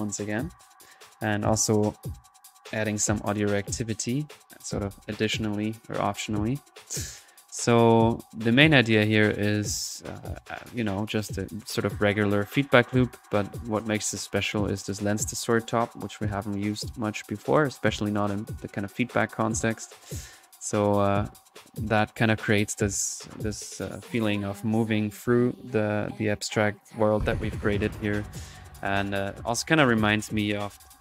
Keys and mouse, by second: 8.4-8.9 middle drag, 8.9 typing, 9.1-10.1 drag, 11.0 click, 13.7-14.2 drag, 14.5-14.9 drag, 16.1 p, 17.7 click, 21.0-31.0 drag.